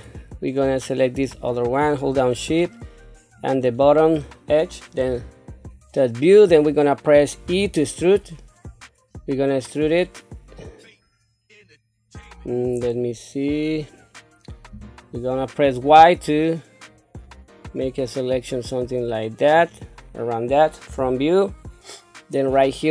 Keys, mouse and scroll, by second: 1.3 shift+click, 3.4 shift+click, 5.0 KP_7, 7.4 e, 20.9 KP_1.